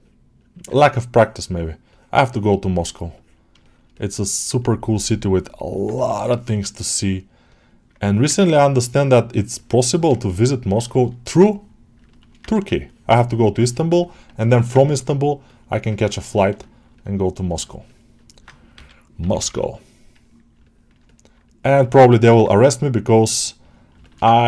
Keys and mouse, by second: 0.2-3.4 drag, 3.5 shift+middle click, 3.8 alt+middle click, 4.5-5.5 drag, 5.6 middle click, 7.3 ctrl+click, 7.9 middle click, 8.5 ctrl+z, 8.5-9.9 ctrl+drag, 10.2 shift+click, 10.7 alt+shift+middle click, 11.4 shift+click, 11.9 shift+middle click, 12.7-13.8 drag, 13.9 middle click, 14.2 shift+middle click, 14.6 ctrl+alt+middle click, 15.3 click, 15.9 ctrl+alt+middle click, 16.2 alt+middle click, 16.5 alt+shift+middle click, 16.8 alt+middle click, 17.4 shift+middle click, 17.7 alt+middle click, 20.5 ctrl+alt+middle click, 20.9 alt+middle click, 21.3 click, 21.8 ctrl+alt+middle click, 22.1 alt+middle click, 23.5 click, 23.9 alt+shift+middle click, 24.2 ctrl+alt+middle click.